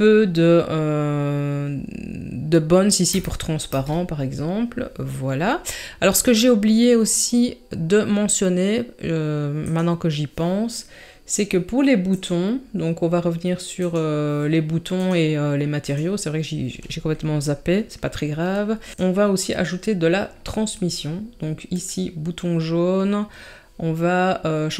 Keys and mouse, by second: 9.6 click, 12.1 click, 15.1-15.9 drag, 21.7 click.